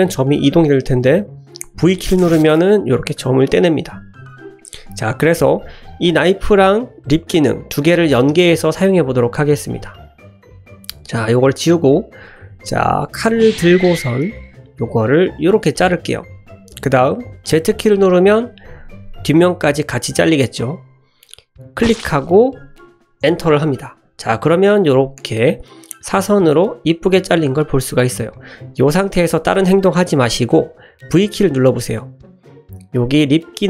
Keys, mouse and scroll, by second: 0.8 click, 1.1 ctrl+z, 1.9 v, 3.9 ctrl+z, 9.5 2, 10.7 ctrl+x, 11.4 click, 12.4 click, 14.7 k, 24.5-26.6 drag, 26.6-27.7 middle drag, 27.9 shift+middle drag, 28.3 middle click.